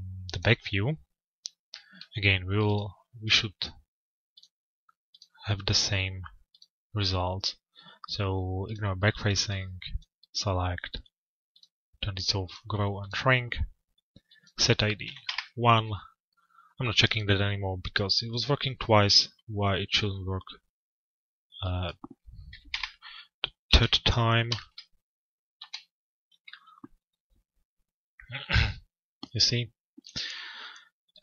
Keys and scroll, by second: 14.8 Return, 18.3 Return, 22.3 Return, 25.6 p.